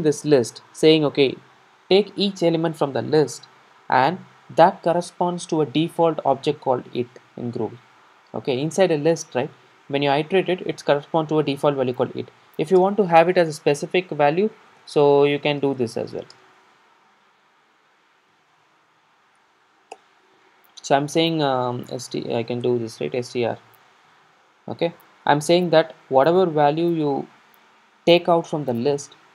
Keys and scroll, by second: 20.0 Return.